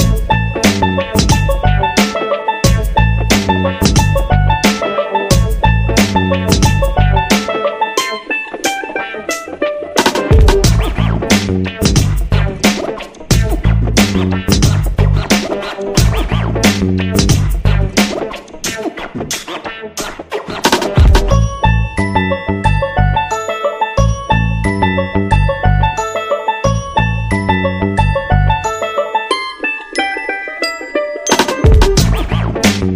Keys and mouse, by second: 0.0 Tab, 0.3-2.2 shift+middle drag, 3.1 middle click, 3.7 KP_3, 4.1 shift+middle click, 6.0 right click, 6.4 g, 7.3 right click, 9.3 shift+right click, 9.6-10.0 shift+middle drag, 10.3 e, 11.4 e, 14.2 middle click, 15.0 KP_1, 15.6 alt+z, 16.2 shift+middle click, 16.7 alt+z, 17.5 g, 18.8 right click, 19.0 g, 19.9 right click, 21.2 right click, 21.2 g, 21.4 g, 22.2 right click, 22.4 g, 24.7 g, 25.8 right click, 25.9 g, 27.6 right click, 27.7 g, 29.8 Tab, 30.2 middle click, 30.9 KP_3, 31.5 alt+z, 32.0 shift+middle click, 32.8 Tab.